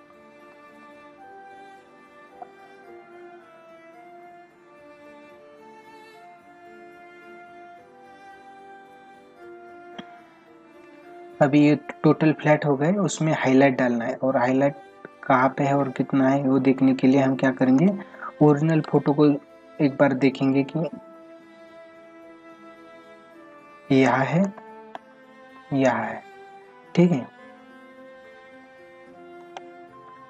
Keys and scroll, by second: 10.3 ctrl+=, 17.2 ctrl+=, 17.8 space, 19.1 ctrl+alt+z, 24.5 space, 29.4 space.